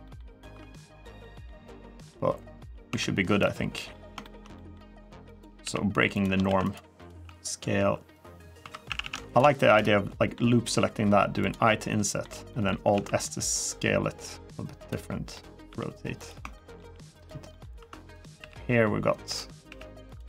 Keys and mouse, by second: 0.3 2, 0.5 middle click, 1.0 middle click, 1.8 middle click, 2.6 1, 3.2 middle click, 4.0 shift+middle click, 4.3 middle click, 5.1 click, 5.4 g, 5.9 click, 6.2 ctrl+r, 6.7 click, 7.0 s, 7.9 click, 8.4 3, 8.6 a, 8.8 a, 9.0 alt+shift+click, 9.5 middle click, 10.5 i, 11.1 click, 11.4 middle click, 12.2 middle click, 12.7 alt+s, 14.5 click, 15.1 middle click, 15.4 r, 15.9 click, 16.3 shift+middle click, 16.9 click, 17.3 middle click, 17.5 1, 18.0 click, 18.1 g, 19.1 click, 19.4 g, 19.8 click, 20.0 3.